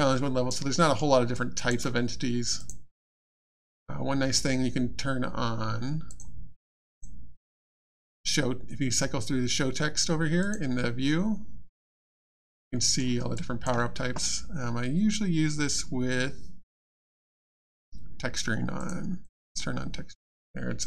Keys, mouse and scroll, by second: 0.7 alt+middle click, 0.9-1.3 alt+scroll down 3, 1.3 alt+click, 2.6 click, 6.1 click, 10.4 click, 12.2 alt+click, 12.7 alt+middle click, 13.0 alt+scroll down 1, 13.3 alt+click, 18.8 click, 20.4 alt+click.